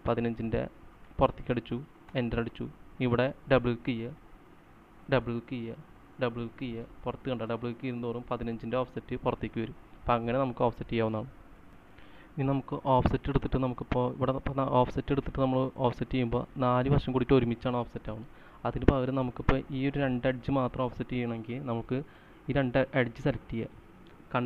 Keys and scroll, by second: 1.3-2.2 typing, 2.8 Return, 5.6-6.3 typing, 12.5 c, 18.8 Escape, 19.8 space.